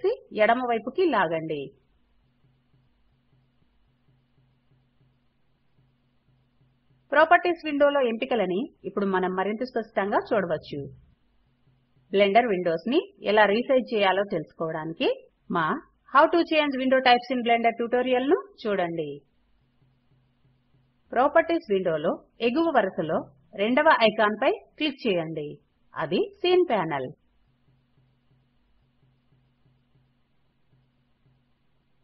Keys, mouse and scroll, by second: 20.0 click.